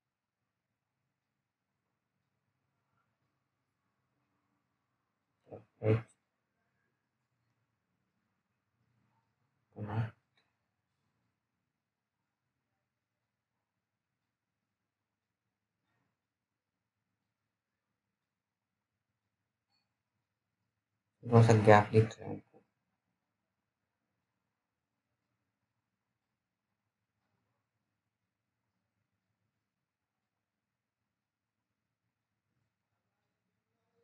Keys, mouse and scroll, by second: 2.0 click, 5.5 alt+middle click, 6.1-7.3 scroll up 1, 7.3 p, 8.0-8.5 scroll down 1, 8.5 alt+middle click, 9.2-10.4 scroll up 1, 11.0 click, 11.6-12.4 scroll down 1, 12.4 click, 16.3-18.4 scroll down 1, 18.9 click, 22.9-23.6 scroll up 1, 23.6 click.